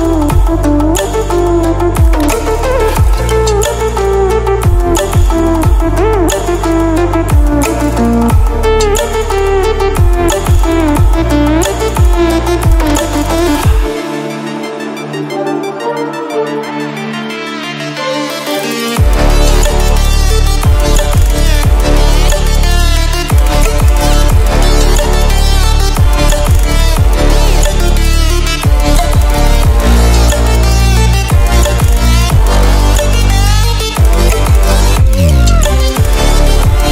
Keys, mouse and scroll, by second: 2.3 click, 7.2 click, 18.2-21.4 drag, 31.7-32.1 click, 32.6-34.7 drag, 35.6-36.9 drag.